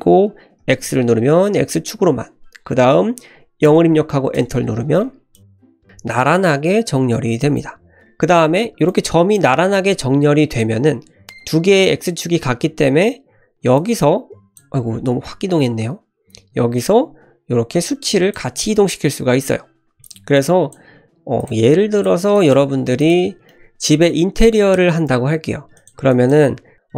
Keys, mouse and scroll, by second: 5.3 click, 5.5 click, 6.9-7.2 scroll up 1, 7.4 shift+middle click, 8.0 click, 8.8 click, 13.7 click, 15.1 ctrl+z, 16.7-18.3 shift+drag, 19.0-19.7 scroll down 1, 19.7-20.0 scroll down 3, 20.0 click, 20.3 click, 21.4 click, 21.7 click, 22.3 shift+click, 22.7 x, 23.5 shift+middle click, 25.8 click, 26.1 click.